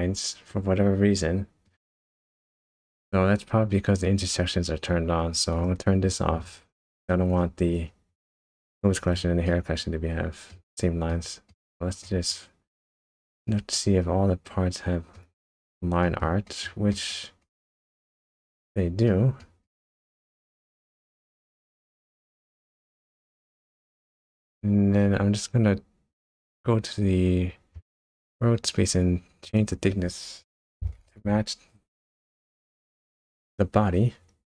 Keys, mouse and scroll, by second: 1.8-2.4 shift+scroll up 2, 2.9 click, 5.5 click, 6.8-7.3 scroll down 1, 7.3-8.4 scroll down 5, 8.4 scroll up 2, 9.4 shift+middle click, 11.1 shift+middle click, 12.0 shift+middle click, 12.9 shift+middle click, 13.5 shift+middle click, 13.7 middle click, 15.4 shift+middle click, 16.0 shift+middle click, 16.4 middle click, 16.9 shift+middle click, 17.4 shift+middle click, 17.8 middle click, 19.4 shift+middle click, 19.9 shift+middle click, 20.4 middle click, 20.7 middle click, 21.2 shift+middle click, 21.6 shift+middle click, 22.1 middle click, 22.8-23.2 scroll up 3, 23.2 shift+middle click, 24.1-24.6 scroll up 3, 25.0-25.9 scroll down 2, 26.5 click, 28.1-29.4 scroll down 6, 29.4 click.